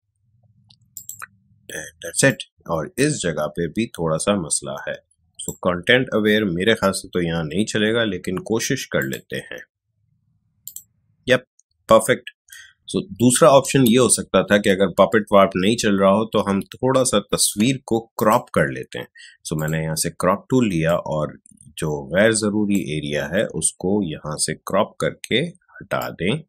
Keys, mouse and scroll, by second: 0.9-7.0 drag, 7.0 shift+BackSpace, 8.9 click, 14.0 ctrl+alt+z, 18.1-25.1 drag, 25.9-26.4 drag.